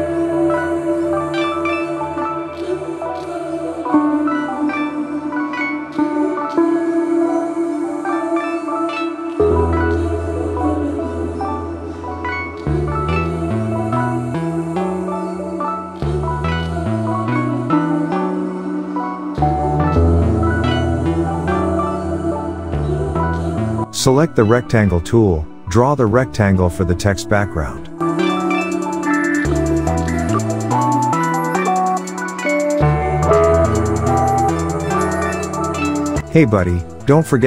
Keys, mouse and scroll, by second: 7.3-13.3 typing, 14.1 click, 14.6 alt+scroll down 1, 15.5 click, 15.8-17.2 shift+click, 18.5 click, 20.1-21.0 click, 21.2 alt+scroll down 1, 21.5 alt+scroll up 1, 21.9 space, 22.0 click, 22.2 space, 23.1-27.4 drag, 27.5 space, 27.7 click, 27.9-28.4 space, 28.9 click, 32.7 space, 32.8 click, 33.0 space, 34.2-36.9 drag.